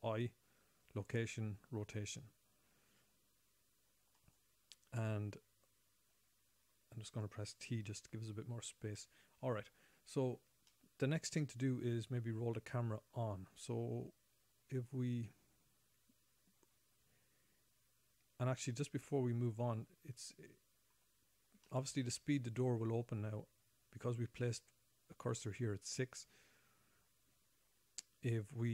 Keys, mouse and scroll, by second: 0.0 i, 5.7-7.1 scroll down 5, 7.1 scroll up 1, 8.1 t, 8.6 scroll down 2, 9.4 middle click, 11.1 shift+middle click, 11.8 middle click, 19.0 middle click, 22.0 shift+middle click, 23.8-24.2 scroll up 1.